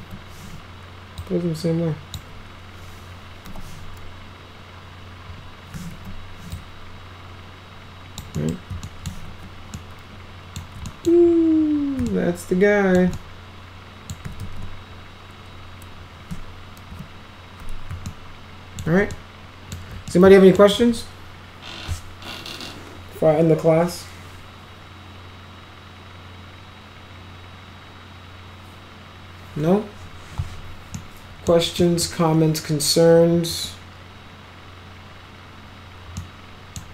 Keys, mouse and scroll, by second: 0.0 w, 1.2 click, 3.5 e, 5.9 w, 6.5-8.2 drag, 8.3 middle click, 8.9 alt+middle click, 9.2 alt+q, 9.7 alt+middle click, 10.9 right click, 12.1 ctrl+alt+right click, 12.9 ctrl+alt+middle click, 13.1 alt+middle click, 14.4 ctrl+z, 16.9 p, 18.1 ctrl+alt+middle click, 19.1 alt+shift+middle click, 20.1 alt+middle click, 30.9 middle click, 31.8 middle click, 36.2 middle click.